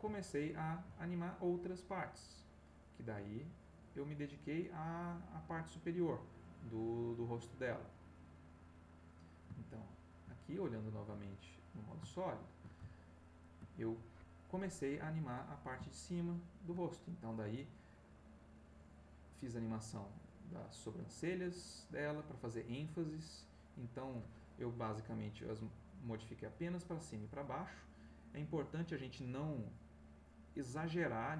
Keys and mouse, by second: 0.1 shift+click, 1.9 click, 3.4 click, 8.8 click, 9.6 shift+middle click, 11.5 click, 12.1 shift+click, 12.3 shift+middle click, 13.0 ctrl+shift+middle click, 15.9 shift+middle click, 18.5 click, 20.3 middle click, 21.5-30.8 drag.